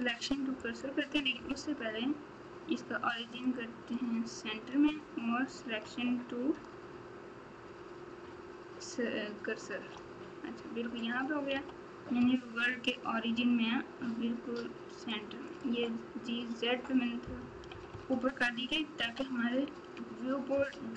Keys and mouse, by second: 0.7-3.9 right drag, 6.5 shift+s, 11.6 g, 15.5-17.7 drag, 20.5 KP_3.